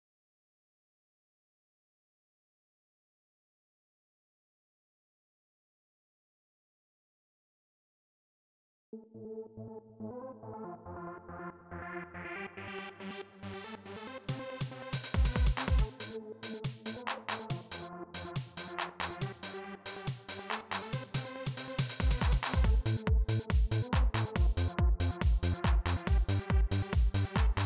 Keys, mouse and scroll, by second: 0.5 click, 1.1 click, 2.2 click, 3.1 click, 4.6 click, 5.3 click, 6.8 click, 8.6 space, 9.8-10.9 drag, 13.5-16.1 drag, 16.9-19.0 drag.